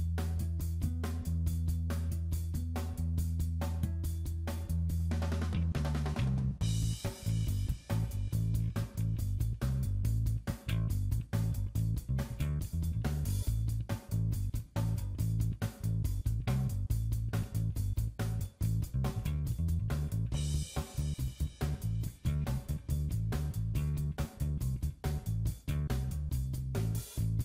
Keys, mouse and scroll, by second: 0.2 middle click, 1.3-1.7 scroll up 4, 1.7 shift+middle click, 3.4 click, 6.2 click, 10.5 middle click, 12.1 ctrl+z, 12.1 Tab, 13.5 click, 14.9 click, 19.1 click, 20.6 click, 26.0 click.